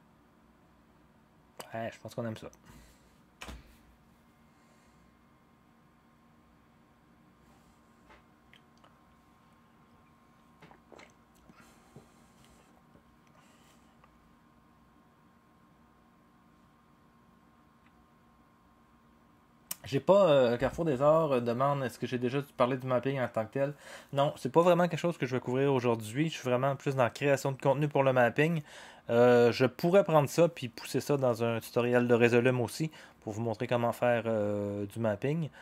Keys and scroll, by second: 3.4 0.